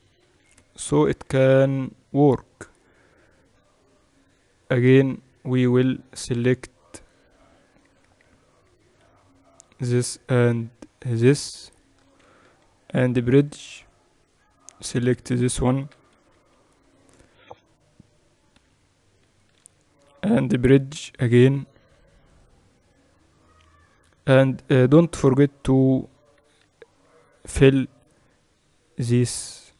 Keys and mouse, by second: 0.0-2.4 typing, 4.6 click, 5.6-7.9 middle drag, 7.9-9.1 typing, 11.8-13.8 right drag, 12.3 w, 14.0-15.3 middle drag, 16.2-16.8 KP_8, 17.0 KP_8, 19.4-23.4 right drag, 20.2 w, 25.7-27.6 drag, 27.6-29.7 right drag.